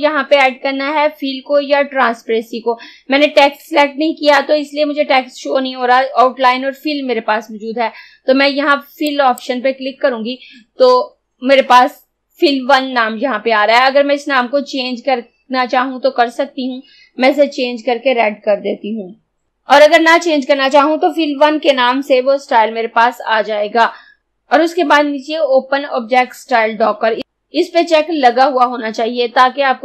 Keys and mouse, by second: 9.2 click, 17.7 BackSpace, 19.3 r.